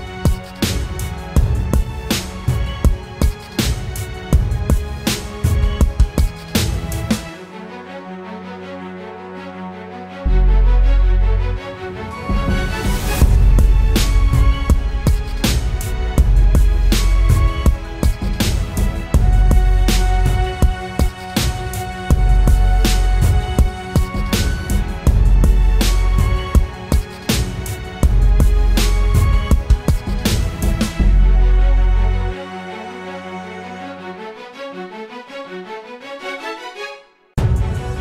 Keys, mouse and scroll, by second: 0.3 double click, 0.7-1.6 typing.